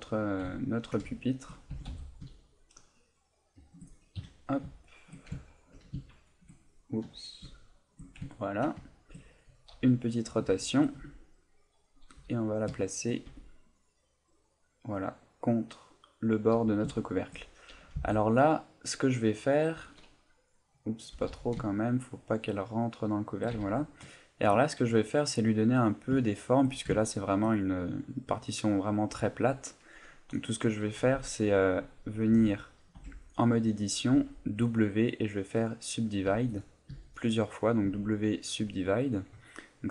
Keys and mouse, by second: 0.7 ctrl+middle click, 1.2 shift+middle click, 1.7 g, 3.6 shift+click, 4.2 KP_3, 4.8 shift+middle click, 5.4 ctrl+middle click, 5.9 middle click, 7.0 KP_3, 7.6 shift+middle click, 8.3 ctrl+middle click, 8.8 shift+middle click, 10.7 shift+click, 10.9 g, 11.5 click, 12.1 r, 12.6 click, 13.2 g, 16.3 click, 16.6 a, 17.0 shift+middle click, 17.9 b, 18.8 middle click, 20.3 middle click, 21.1 g, 23.3 shift+click, 23.5 a, 23.7 middle click, 24.2 ctrl+middle click, 24.6 middle click, 25.4 middle click, 25.9 right click, 26.2 middle click, 27.1 ctrl+middle click, 27.9 middle click, 32.3 w, 33.0 Tab, 34.1 w, 36.3 w, 36.9 w.